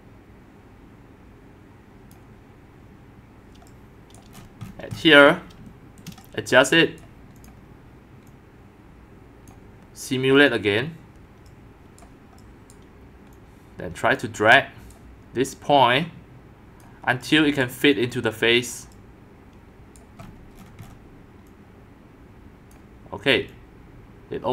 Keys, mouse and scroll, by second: 3.5 click, 4.3 middle click, 4.4 scroll up 6, 4.6-5.0 scroll down 7, 5.0-6.0 scroll up 6, 6.0-7.0 shift+middle drag, 7.0 click, 8.3-9.5 drag, 10.3 click, 12.0 right click, 12.7 right click, 14.9 right click, 16.6-20.2 drag, 20.2-20.6 scroll up 6, 20.6-21.5 scroll down 10, 21.5-22.7 scroll down 1, 22.7 scroll down 1, 22.7 click.